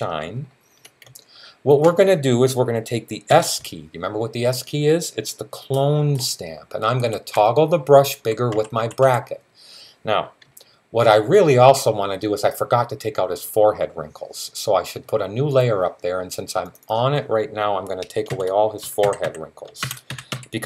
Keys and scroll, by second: 3.1 s, 5.6-8.8 typing, 17.9-20.6 typing.